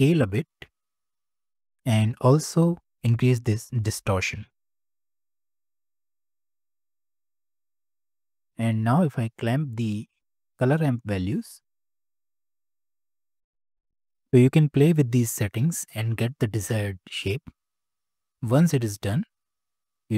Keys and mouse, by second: 4.3-5.6 drag, 5.6 middle click, 7.9 click, 10.5-11.8 middle drag, 16.9-18.9 drag.